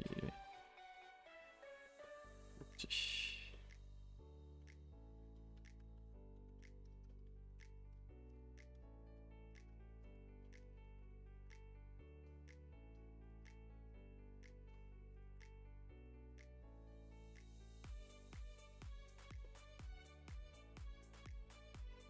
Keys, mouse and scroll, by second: 0.2 middle click, 0.4 a, 0.5 a, 0.6 middle click, 1.0 2, 1.2-2.5 middle drag, 2.5 1, 2.8 click, 2.9 g, 3.5-6.0 middle drag, 6.0 ctrl+r, 6.5 middle click, 7.3 a, 7.4 a, 7.6 2, 7.8 click, 8.2 shift+click, 8.4 f, 8.7 click, 9.0 shift+click, 9.6 click, 9.9 shift+click, 10.1-11.5 typing, 10.4 middle click, 11.3 click, 12.2-13.3 middle drag, 13.3 click, 13.4 g, 14.5 middle click, 15.2 click, 15.3 g, 16.4 click, 16.4 g, 16.9-17.9 middle drag, 17.9 click, 18.1 middle click, 18.9 g, 19.4 middle click, 19.9 g, 21.3 click, 21.8 Tab, 21.9 middle click.